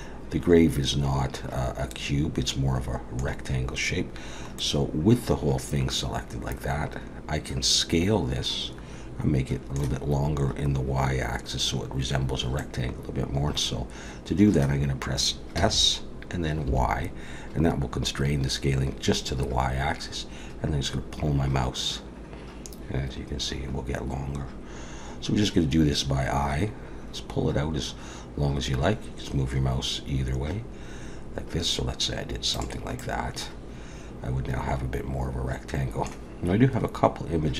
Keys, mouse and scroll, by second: 4.6 middle click, 12.6 middle click, 15.6 s, 33.0 middle click.